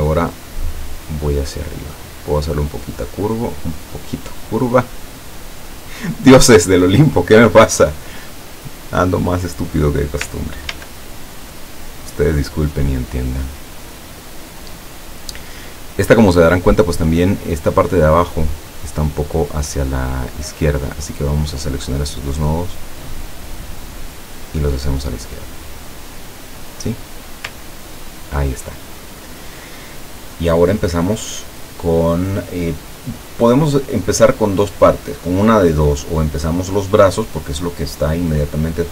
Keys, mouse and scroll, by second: 2.4-4.0 drag, 5.9 click, 9.3 click, 10.8 ctrl+d, 11.7-16.3 ctrl+drag, 17.0 click, 20.8-22.2 drag, 22.6-26.2 drag, 26.8 click, 27.7-28.1 ctrl+scroll down 2, 28.6 ctrl+scroll up 2, 29.1 ctrl+scroll down 2.